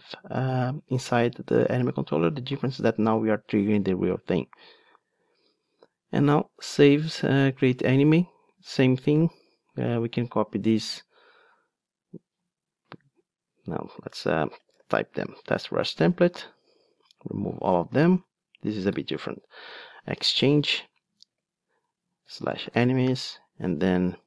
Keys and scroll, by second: 15.5 Return, 16.1 alt+shift+Right, 19.6 Return.